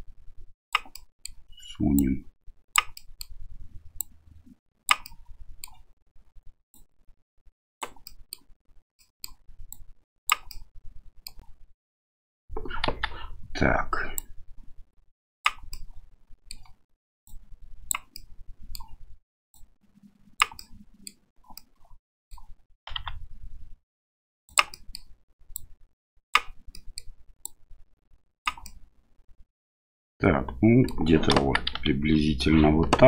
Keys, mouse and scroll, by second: 0.9 middle click, 1.9 click, 3.0 middle click, 4.0-4.9 drag, 5.0-5.7 middle drag, 6.8-7.8 drag, 8.1 middle click, 9.0 middle click, 9.7 click, 10.6 middle click, 12.8 KP_1, 14.2-15.4 drag, 15.7-16.5 middle drag, 17.2-17.9 drag, 18.1-18.8 middle drag, 19.5 click, 20.6-21.1 middle drag, 21.6-22.4 middle drag, 22.9 s, 24.7 middle click, 25.6 click, 26.7 middle click, 27.5 click, 28.6-30.9 middle drag, 31.3 KP_1, 31.8 KP_3.